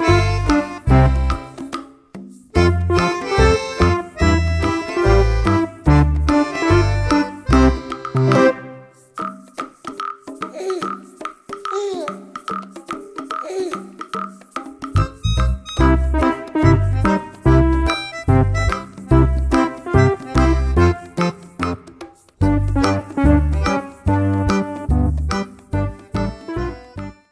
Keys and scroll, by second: 5.9 ctrl+c, 6.0 ctrl+v.